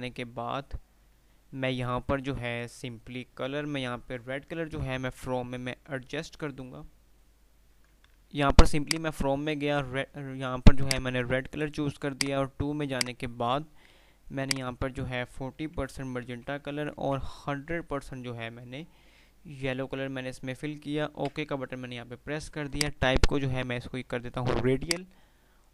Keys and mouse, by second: 8.3-15.3 drag, 16.5 Tab, 22.9 click.